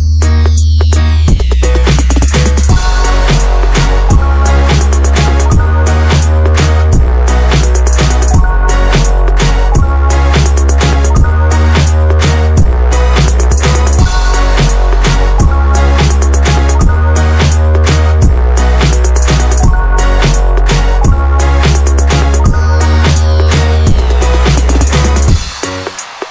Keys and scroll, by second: 4.3-5.2 typing, 10.2 typing, 12.8 Escape, 14.8 typing, 15.8 Escape, 17.5 m, 17.6 space, 18.6 Escape, 21.1 Escape, 21.3 Escape, 21.4 Escape, 21.6 Escape, 21.7 Escape, 21.8 Escape, 22.1 ctrl+s, 24.2 Escape, 25.6 Escape, 25.7 Escape, 26.0-26.3 typing.